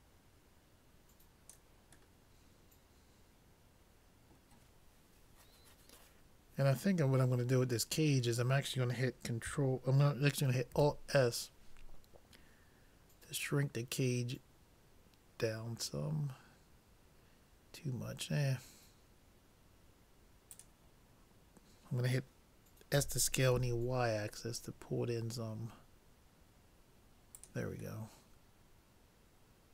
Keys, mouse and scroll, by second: 2.2-4.0 middle drag, 10.8 alt+s, 23.1 s, 28.0-29.7 middle drag.